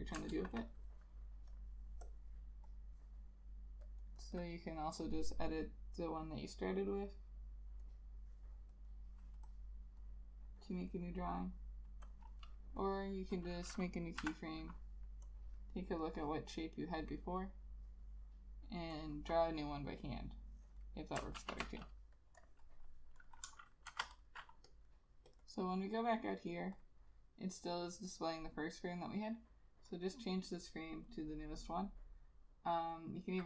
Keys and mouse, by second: 0.5 ctrl+a, 1.6 double click, 4.2 double click, 14.3 F7, 21.5 ctrl+z, 23.6 ctrl+z, 24.0 shift+F5, 25.5 double click.